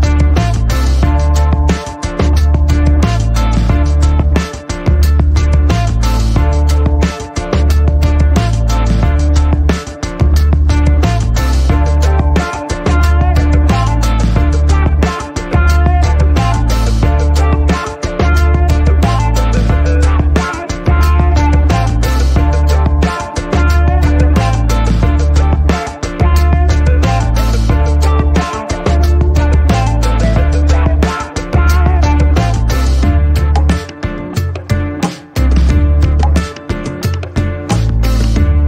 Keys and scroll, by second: 12.9 F12, 16.5 Home.